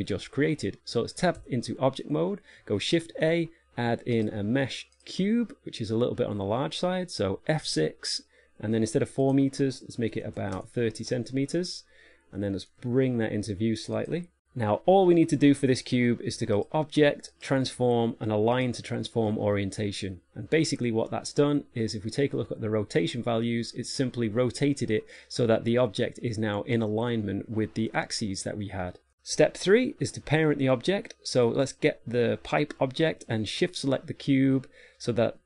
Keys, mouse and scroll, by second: 1.8 Tab, 3.4 shift+a, 8.1 F6, 13.2 g, 16.9 click, 21.7 click, 31.9 right click, 34.7 shift+right click.